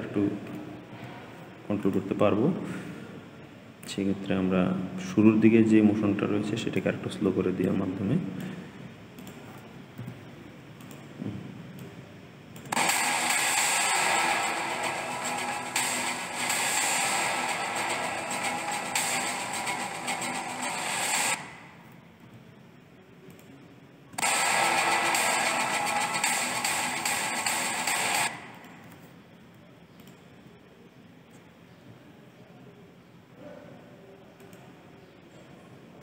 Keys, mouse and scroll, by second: 0.8 g, 3.7-6.8 drag, 7.5 click, 9.1 click, 9.8 g, 11.7 click, 12.6 space, 21.2 space, 22.1 g, 24.0 space, 28.1 space, 28.4 click, 29.9 shift+click, 31.8 g, 35.9 space.